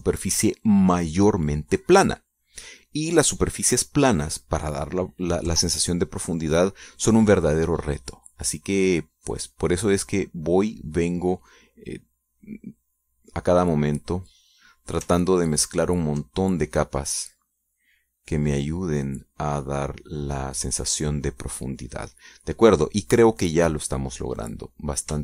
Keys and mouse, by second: 0.2 middle click, 0.6 click, 2.6 click, 2.8 middle click, 4.0-5.2 middle drag, 9.1-13.9 drag, 14.1 middle click, 14.9-15.9 drag, 17.2 ctrl+click, 17.9-22.5 ctrl+drag, 22.6-23.8 middle drag.